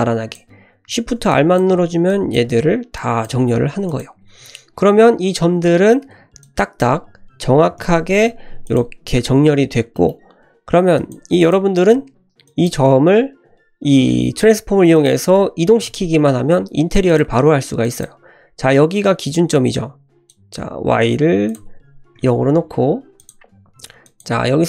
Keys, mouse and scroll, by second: 1.0 shift+r, 1.3 click, 1.7 shift+r, 2.1 click, 2.5 shift+r, 2.9 click, 3.4 shift+r, 3.8 click, 6.4 click, 7.6 s, 8.6 click, 9.6 scroll down 1, 9.9 shift+middle click, 10.9 click, 11.4 click, 12.2 shift+middle click, 12.4 click, 14.9-16.3 drag, 17.0 click, 17.8 drag, 20.2 click, 21.4-22.6 drag, 23.1 click, 23.5-24.0 scroll up 1, 24.0 click.